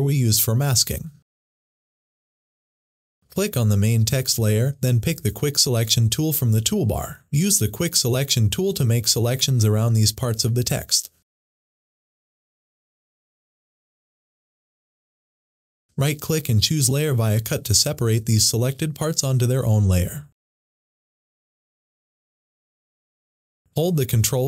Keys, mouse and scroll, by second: 3.5 click, 7.0 click, 11.4 click, 15.7 right click, 18.9 click, 22.0 click.